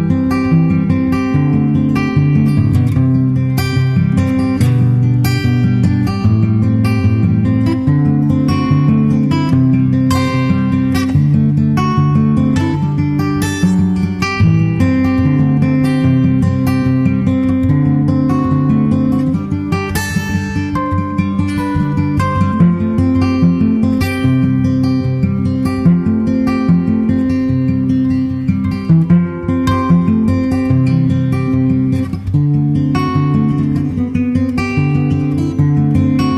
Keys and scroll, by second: 5.8 super+Tab, 6.0 super+Tab, 30.1 shift+super+Left.